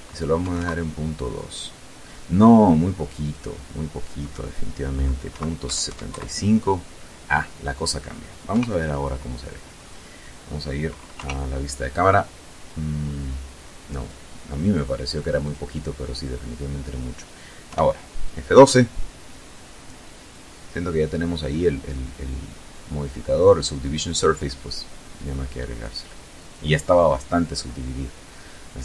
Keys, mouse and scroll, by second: 2.2 click, 4.2 KP_Decimal, 4.6 KP_7, 4.8 KP_5, 5.1 KP_Enter, 7.5 KP_0, 10.1 KP_0, 12.9 click, 13.7 click, 14.4 click, 16.6 F12.